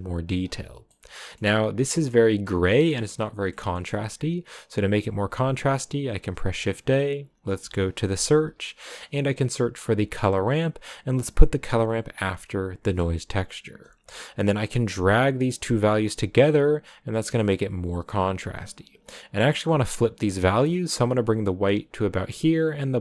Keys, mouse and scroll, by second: 0.9 middle click, 1.3-2.0 scroll up 3, 2.0 scroll up 1, 2.0 middle click, 2.8 scroll down 3, 3.1-10.3 middle drag, 14.9-23.0 drag.